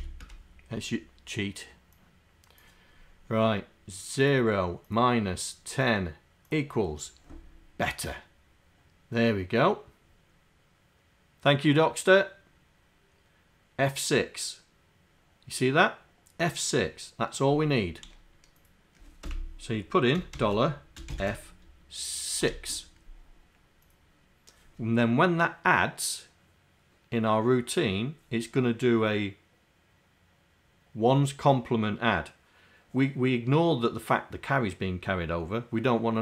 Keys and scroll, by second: 0.0 c, 0.3 Return.